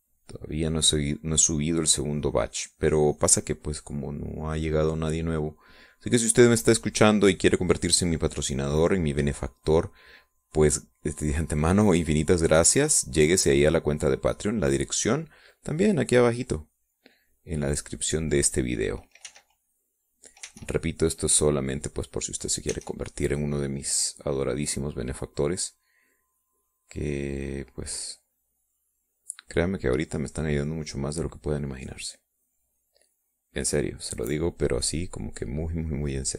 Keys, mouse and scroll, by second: 4.8-5.9 middle drag, 8.4-10.8 drag, 10.9-19.9 drag, 20.6 w, 20.7 click, 21.8 e, 21.9-23.5 drag, 24.0 e, 25.4-32.5 drag, 33.5-36.3 drag.